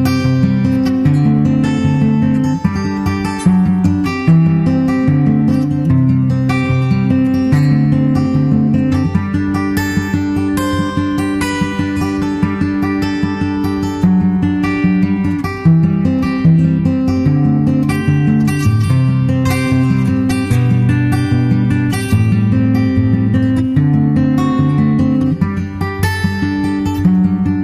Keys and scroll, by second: 25.2 super+Tab, 25.4 super+Tab, 26.0 super+Tab.